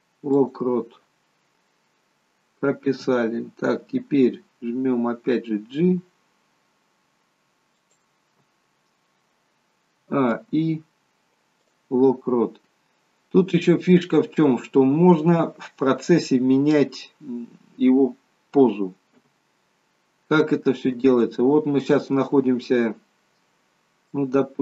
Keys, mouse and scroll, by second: 5.8 g, 10.0 a, 10.3 i, 12.9 scroll up 3, 13.5 scroll up 1, 14.1 scroll down 1, 19.2 KP_0, 20.4 scroll up 5, 21.2 shift+middle click.